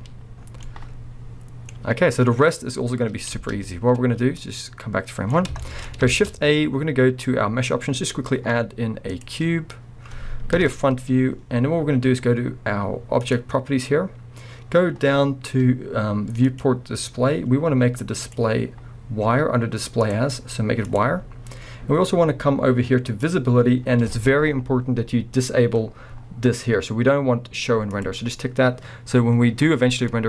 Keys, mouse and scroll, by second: 0.4 scroll down 2, 0.7-4.4 middle drag, 2.3 scroll up 2, 3.3 space, 4.4-5.6 drag, 5.6-13.2 shift+middle drag, 6.1 shift+a, 10.6 KP_1, 11.1-13.2 scroll, 13.2 click, 16.4-28.0 drag, 17.1-18.2 scroll, 23.8-24.9 scroll down 2, 24.9-27.9 scroll down 1.